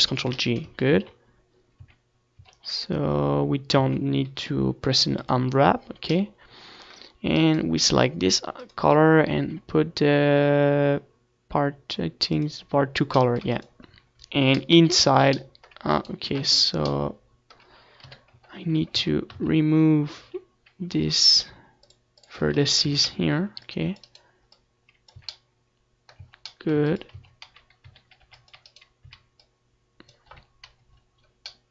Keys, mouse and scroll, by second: 1.1 z, 1.7-3.5 right drag, 3.5 ctrl+j, 4.2 z, 4.4 z, 4.9-6.2 middle drag, 5.1 z, 5.7 Tab, 6.2 Tab, 8.4 ctrl+s, 9.1-10.6 middle drag, 11.0-15.9 right drag, 16.6 middle click, 16.9 ctrl+s, 19.7 right click, 20.2 click, 21.2-22.4 middle drag, 21.7 KP_7, 22.7 z, 22.9 Tab, 23.9 z, 25.6-27.8 drag, 26.3 z, 26.6 a, 26.9 c, 28.0-29.7 right drag, 28.3-29.7 drag, 28.9 z, 29.1 middle click, 29.7 z, 30.0 Tab, 30.6 ctrl+s, 31.0 Tab, 31.4 z.